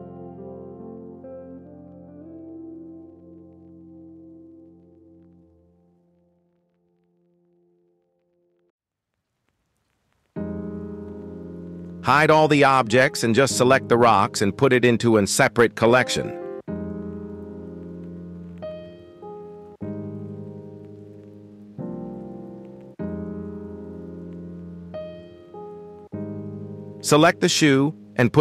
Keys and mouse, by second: 0.2 x, 0.3 x, 0.3 x, 0.6 g, 2.2 click, 4.8 ctrl+s, 6.1 KP_1, 10.6 h, 11.5 click, 13.2 h, 14.2-14.9 drag, 15.5-15.8 shift+drag, 16.6 g, 18.6 m, 23.7 Return, 25.8 h, 26.6 click, 27.4-28.4 middle drag.